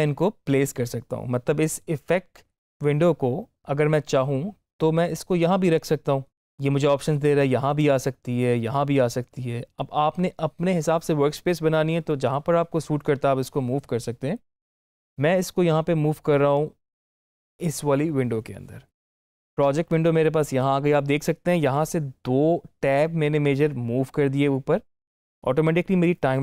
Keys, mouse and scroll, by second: 25.0 click.